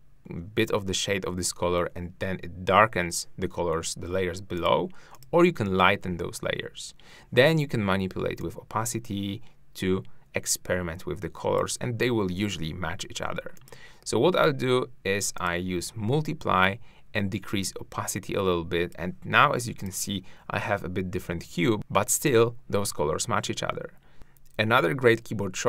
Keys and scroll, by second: 21.7 shift+`.